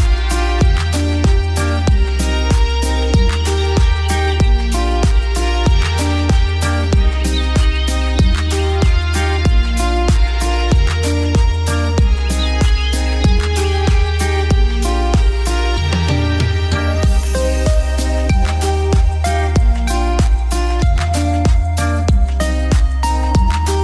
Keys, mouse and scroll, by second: 3.1 right click, 3.6 click, 5.7 shift+Page_Up, 6.6 shift+click, 11.6 F3, 13.2-19.3 drag, 19.3-21.4 drag, 21.4-23.8 drag.